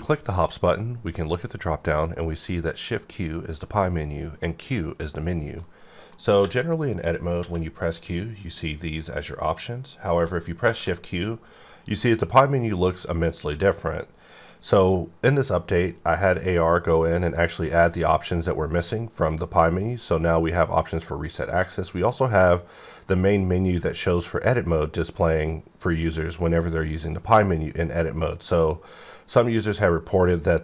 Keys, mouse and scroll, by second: 1.3 click, 5.6 middle click, 7.3 q, 9.4 q, 10.5 shift+q.